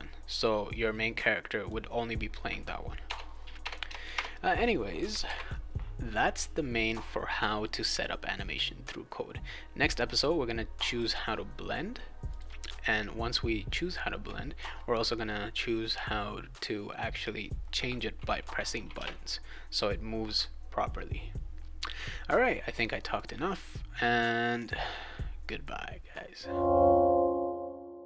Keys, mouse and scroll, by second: 3.0 BackSpace, 3.6 BackSpace, 3.8 BackSpace, 4.1 BackSpace, 5.2 ctrl+s, 10.8 click, 12.3 click, 18.9 space, 23.1 click, 24.6 click.